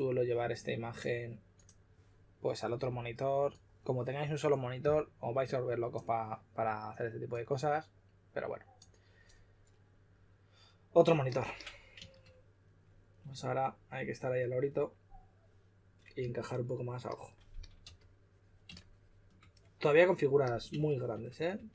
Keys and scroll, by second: 16.1 typing, 17.5-17.8 typing, 21.5 2.